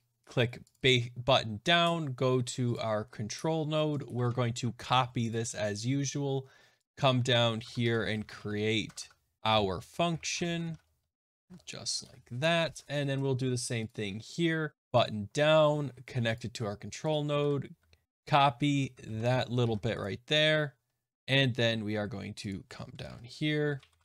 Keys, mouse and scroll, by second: 0.7 click, 0.8 click, 2.7 click, 3.9 click, 4.2 ctrl+a, 4.8 ctrl+c, 5.2 click, 6.8 click, 7.6 Tab, 7.8 Return, 7.8-10.7 typing, 10.0 right click, 10.5 click, 10.6 right click, 10.8 click, 11.9 Return, 12.6 alt+Tab, 13.8 click, 14.8 click, 15.0 click, 16.3 click, 17.0 click, 17.3 ctrl+a, 18.0 ctrl+x, 18.0 ctrl+z, 18.0 ctrl+c, 19.0 ctrl+a, 19.5 ctrl+c, 19.9 click, 21.8-22.4 scroll down 1, 22.4 scroll down 2, 22.4 click, 22.4 middle click, 22.9 Return, 23.0 Return, 23.3-24.0 typing.